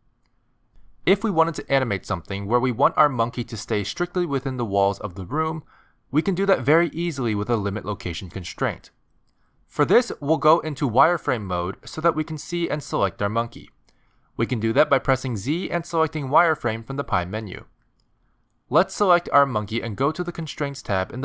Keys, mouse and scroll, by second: 0.7 middle click, 1.8 s, 2.7 middle click, 3.9 click, 4.9 click, 5.3 scroll down 3, 5.6-6.4 scroll up 1, 6.4 middle click, 6.4 g, 8.9 middle click, 14.1 click, 15.8 z.